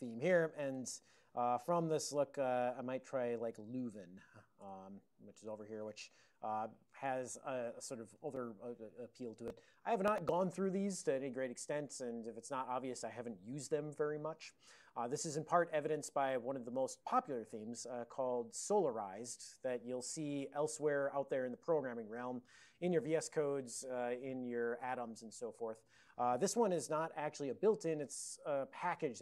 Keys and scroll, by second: 0.8 Tab, 3.1-4.1 typing, 4.1 Tab, 4.7 Return, 5.7 ctrl+a, 6.2 ctrl+n, 6.4 ctrl+p, 7.0 ctrl+n, 8.0 ctrl+n, 8.2 ctrl+n, 9.2 ctrl+n.